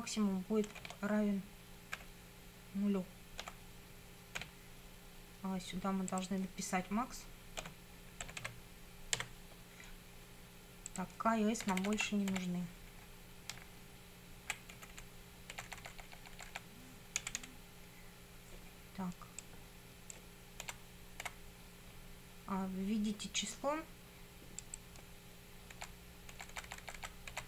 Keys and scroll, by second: 0.8 shift+;, 2.0 =, 3.5 0, 4.4 ;, 7.6-9.2 typing, 11.7 Delete, 13.6 Right, 14.7 Left, 15.6 Delete, 17.2 Down, 20.7 Delete, 25.8 Delete.